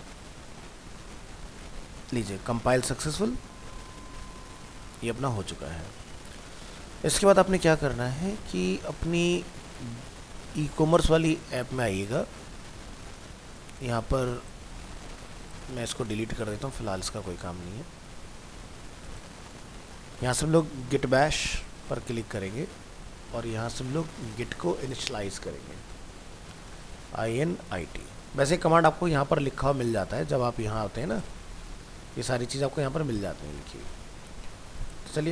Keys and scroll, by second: 33.7 alt+Tab.